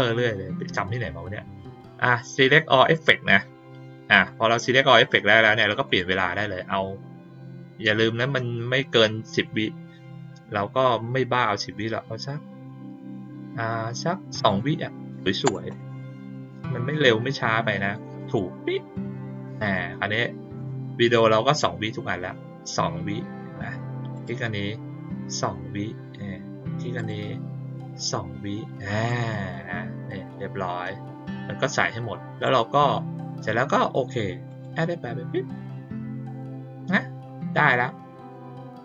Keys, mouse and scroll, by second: 4.1 click, 5.8 click, 18.2 click, 19.4 click, 20.5 click, 21.0 click, 21.4 click, 24.1 click, 26.9 click, 29.0-32.4 drag, 34.4 click.